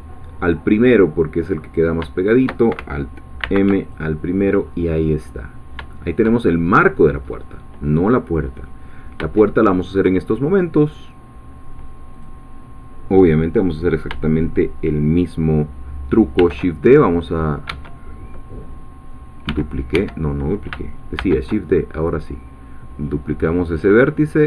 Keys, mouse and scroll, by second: 0.4 click, 1.8 click, 2.2 shift+click, 3.4 alt+m, 3.8 alt+click, 4.6-5.2 scroll down 2, 5.6-5.9 scroll down 3, 5.9 shift+middle click, 6.4-8.6 shift+scroll up 3, 8.6-9.2 scroll down 2, 9.4 shift+middle click, 12.1 click, 16.6 shift+e, 19.5 g, 19.9 Escape, 21.2 shift+d.